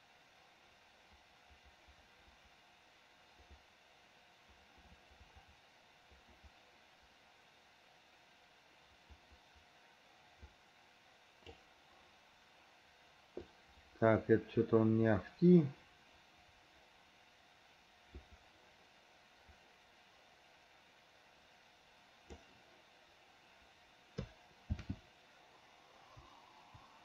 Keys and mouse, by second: 24.7 shift+f.